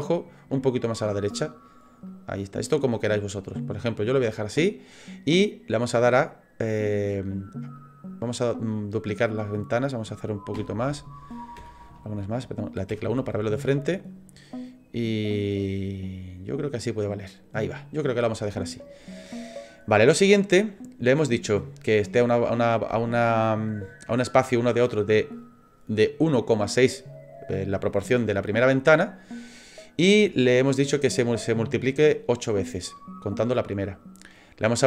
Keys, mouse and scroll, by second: 1.3-2.6 click, 3.1 middle click, 7.8-9.3 click, 9.5 click, 10.5 KP_1, 14.7 click, 18.8 middle click.